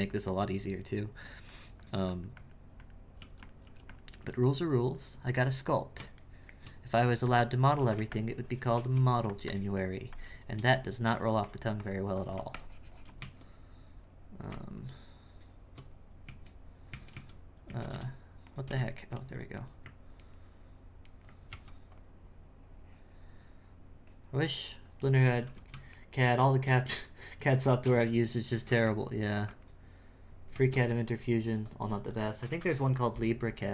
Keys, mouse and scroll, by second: 3.6 f, 4.6-6.2 drag, 6.2 shift+middle click, 7.8 f, 8.1 shift+click, 9.1 f, 9.5-13.2 drag, 13.2 Tab, 14.5 Tab, 16.3 z, 16.9 z, 17.6 z, 17.9 o, 19.6 right click, 20.2 ctrl+right click, 21.0 ctrl+right click, 26.0-27.5 shift+middle drag, 27.5 ctrl+x, 28.6 ctrl+x.